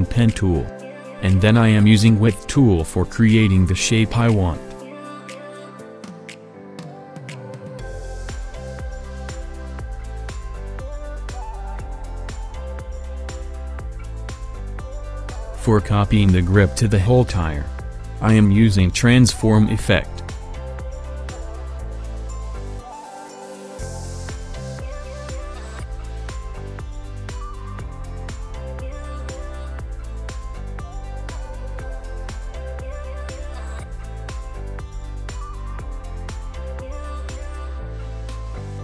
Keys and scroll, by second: 8.4 v, 10.5 r, 12.5 shift+v, 18.5 KP_1, 18.7 KP_0, 20.1 KP_1, 20.2 KP_0, 21.2 Up, 21.4 Up, 21.7 Down, 21.8 Down, 22.1 Down, 22.4 Up, 22.5 Down, 22.6 Down, 22.8 Down, 23.2 Down, 23.6 Down, 24.2 Down, 25.9 Up, 26.0 Up, 26.1-27.1 Up, 26.4 Up, 26.4 Up, 27.3 Up, 28.2 Up, 28.5 Down, 29.0 Down, 29.8 Down, 30.1 Up, 30.2 Up, 30.3 Up, 31.3 Down, 31.8 Up, 32.0 Down, 32.1 Down, 33.3 Up.